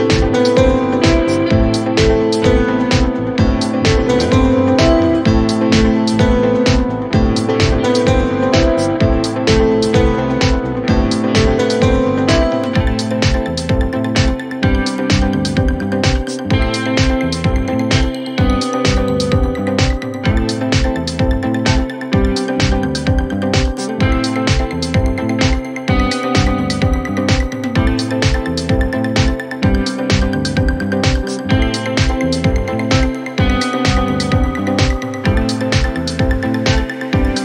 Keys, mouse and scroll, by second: 1.1 click, 3.1-4.3 drag, 7.7 click, 10.4 click, 10.9 click, 14.3 click, 15.6 ctrl+z, 16.5 click, 17.1 click, 19.0 shift+middle click, 19.6 3, 20.9 click, 22.2 click, 22.7 e, 24.5 g, 28.8 shift+middle click, 29.6 scroll up 1, 29.9 g, 33.0-33.3 scroll down 1, 33.3 shift+middle click, 34.3-34.7 scroll up 1, 34.7 scroll down 2, 35.3 shift+middle click, 36.3 e, 37.1 g.